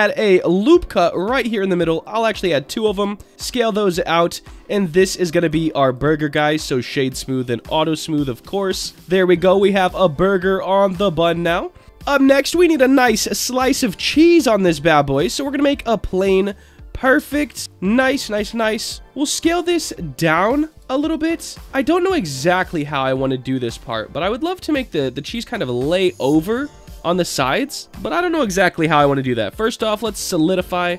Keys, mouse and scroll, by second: 2.2 click, 2.9 s, 4.0 click, 4.3 Tab, 4.6-5.0 middle drag, 5.2 click, 5.5 right click, 7.3 click, 7.6 click, 8.0 scroll down 2, 8.8-9.9 drag, 10.2-11.8 middle drag, 13.5 shift+a, 16.2-17.6 drag, 17.6-18.1 scroll up 2, 18.1-18.9 middle drag, 19.4 s, 20.7 click, 21.0-21.7 middle drag, 22.4-23.9 drag, 25.9 click, 26.8-29.6 drag, 30.4-30.8 middle drag.